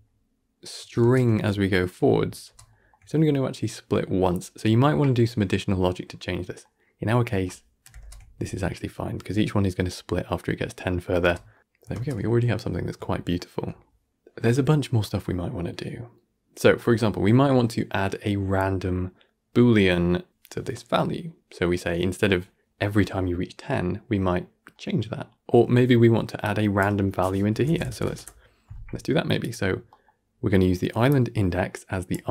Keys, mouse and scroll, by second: 0.0-1.5 shift+middle drag, 1.5-2.0 scroll up 1, 2.0-2.4 scroll down 1, 2.4 shift+space, 3.9 shift+space, 4.2-5.8 shift+middle drag, 5.8 scroll down 2, 6.0-7.4 middle drag, 7.4 scroll down 1, 7.6-9.3 middle drag, 9.3 shift+space, 11.4 shift+space, 12.2-12.7 scroll up 1, 12.7-16.5 shift+middle drag, 18.2-20.3 middle drag, 23.4-26.6 middle drag, 26.6-27.0 scroll up 4, 27.0-27.9 middle drag, 27.9 drag, 31.3-31.7 middle drag, 31.7 scroll up 2, 32.0-32.3 middle drag.